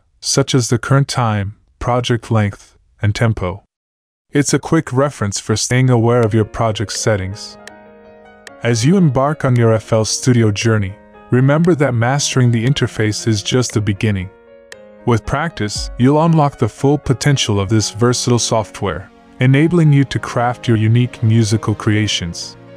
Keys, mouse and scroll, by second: 11.2 F1.